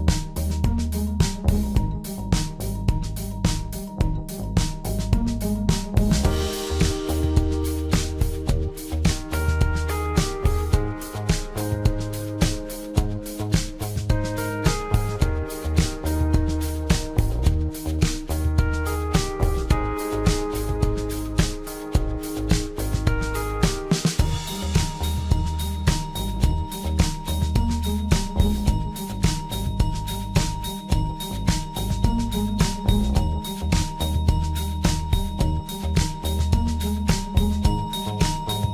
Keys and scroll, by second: 7.6 p, 37.8 m.